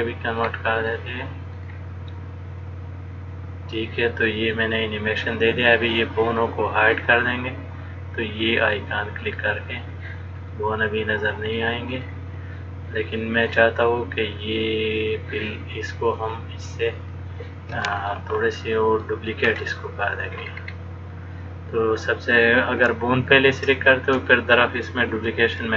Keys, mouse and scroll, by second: 1.0 click, 1.7 click, 2.8 click, 9.9 click, 10.7 middle click, 12.2 click, 15.2 click, 16.4 click, 18.3 middle click, 19.6-20.3 scroll up 2, 20.5-21.5 scroll down 5, 23.4 shift+click.